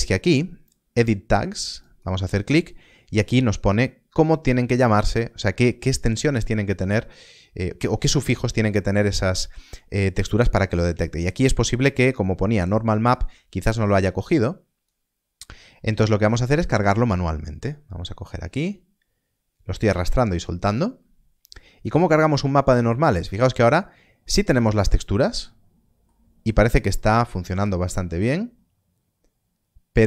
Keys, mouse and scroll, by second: 3.3 click, 3.4 scroll down 1, 13.9-14.9 scroll down 1, 15.7 middle click, 18.3 middle click, 22.0 middle click, 26.4 scroll up 1, 26.9 middle click.